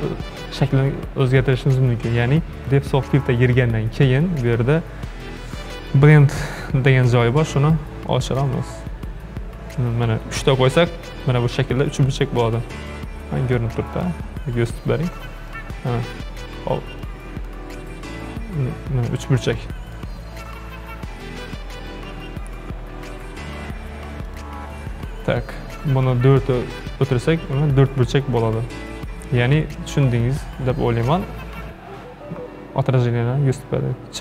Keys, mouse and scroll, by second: 2.6 click, 4.0 scroll down 2, 8.3-11.4 drag, 14.0-15.6 drag, 17.1-21.1 drag, 23.2 ctrl+z, 24.3-29.8 drag.